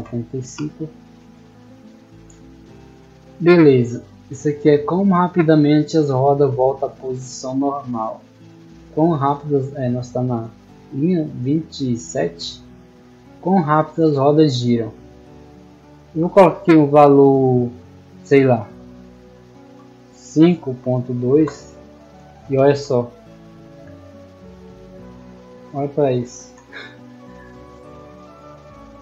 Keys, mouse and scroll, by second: 3.0-4.0 middle drag, 4.9-8.8 middle drag, 15.9 click, 21.6 d, 22.5 d, 23.7 a, 26.5 d.